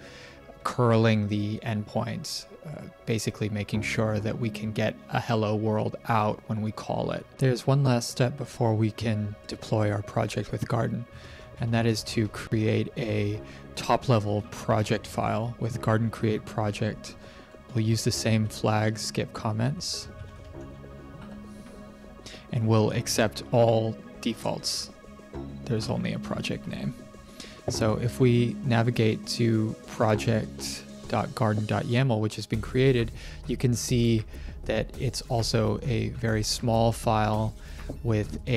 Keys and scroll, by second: 8.3 ctrl+`, 10.8-15.7 typing, 16.8-21.2 typing, 25.7 Return.